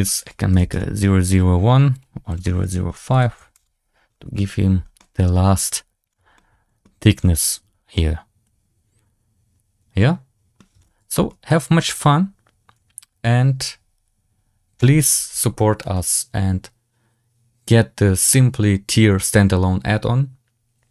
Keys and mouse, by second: 1.8-3.5 drag, 2.9 BackSpace, 3.0 BackSpace, 4.9-5.3 drag, 4.9-5.3 right drag, 6.3-6.7 middle drag, 7.8-10.5 middle drag, 11.0 shift+middle drag, 11.4-13.1 middle drag.